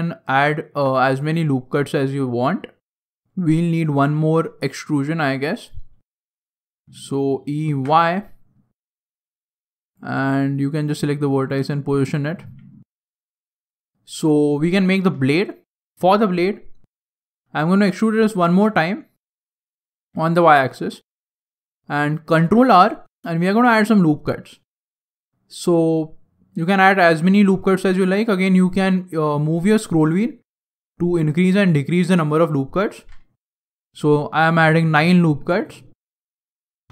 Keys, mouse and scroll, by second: 0.2-0.7 scroll down 3, 0.5 shift+scroll up 1, 0.7 shift+middle click, 1.0 right click, 1.2 g, 2.8 shift+middle click, 4.5 right click, 5.3 right click, 6.2 shift+right click, 6.5 e, 9.1 click, 9.8 right click, 10.0 g, 12.0 right click, 12.3 g, 13.8 shift+middle click, 13.8-14.2 scroll down 5, 15.6 right click, 16.9 shift+right click, 17.7 e, 22.3 ctrl+r.